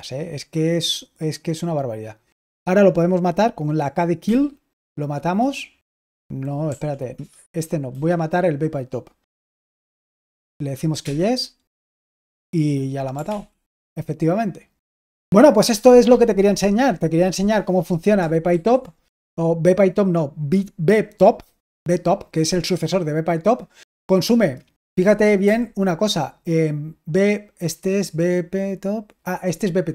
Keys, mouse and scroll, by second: 4.1 k, 6.6 Right, 7.0 Return, 7.8 Down, 9.5 k, 13.2 ctrl+l, 18.4 super+h, 25.3 q.